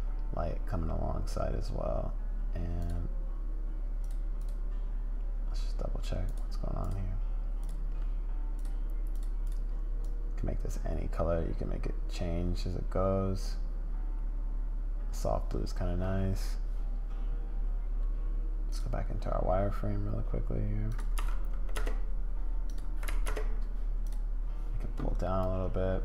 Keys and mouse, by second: 2.8 click, 4.0 click, 4.4 click, 6.3 click, 6.8 click, 7.6 click, 8.6 click, 9.4 click, 18.7 click, 20.9-23.6 drag, 24.0 click.